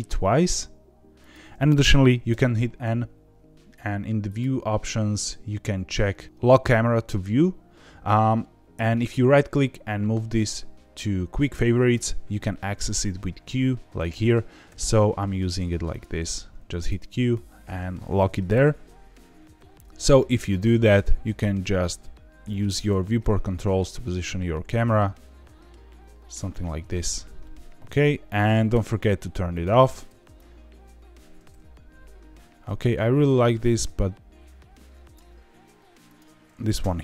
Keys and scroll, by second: 2.2 n, 12.5 q, 14.6 q, 16.2 q, 18.4 n, 19.5 q, 28.6 q.